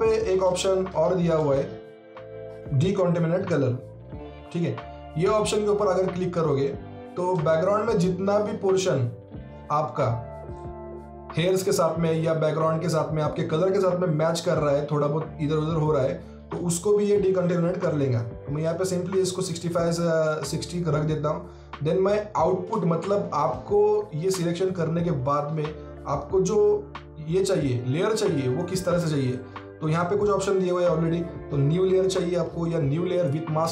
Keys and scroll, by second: 0.5 alt+Tab.